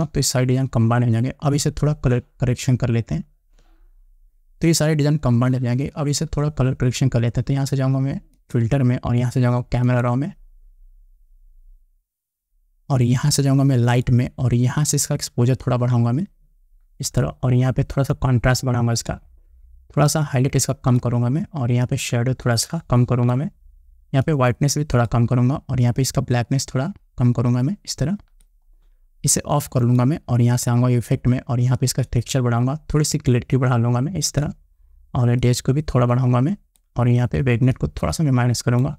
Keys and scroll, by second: 0.3 ctrl+alt+shift+e.